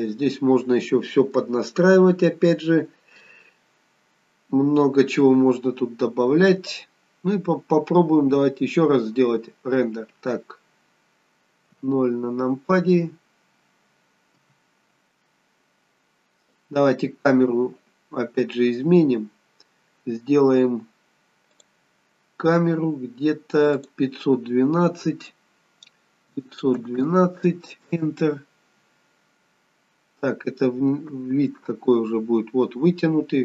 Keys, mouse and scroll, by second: 8.9 click.